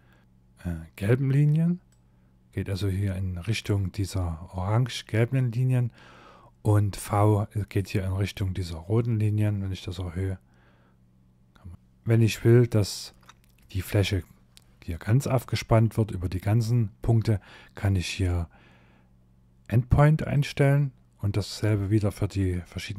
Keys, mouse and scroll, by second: 0.9 click, 8.8 click, 11.5 click, 11.7 middle click, 11.7 scroll down 5, 12.2 shift+middle click, 14.4 middle click, 15.2-15.7 scroll up 2, 15.7 shift+middle click, 19.4 click, 20.8 middle click, 22.6 click.